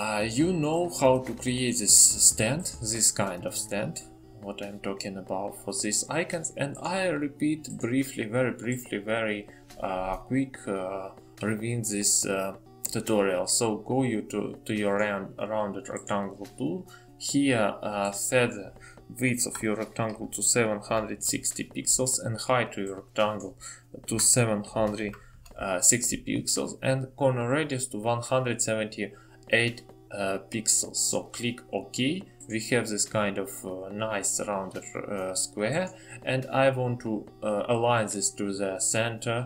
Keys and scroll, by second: 22.5 typing, 28.7 typing.